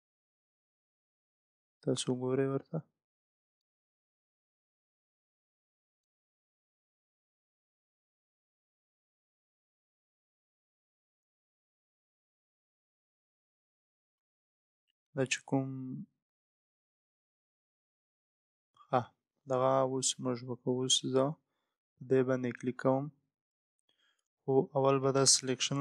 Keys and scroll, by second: 24.6 ctrl+z.